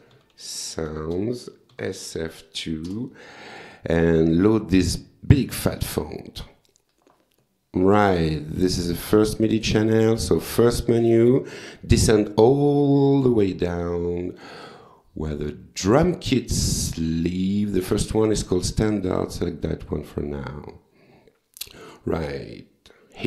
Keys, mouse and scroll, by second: 0.0-2.0 typing, 1.0 Return, 2.9 Return, 5.6 click, 9.8 click, 18.3 click, 20.5 click, 21.9 click.